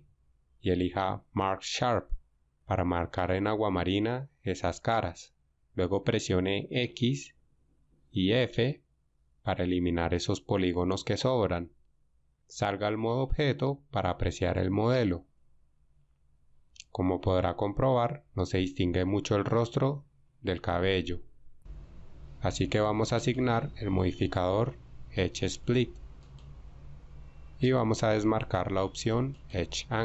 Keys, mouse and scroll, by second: 13.5 Tab.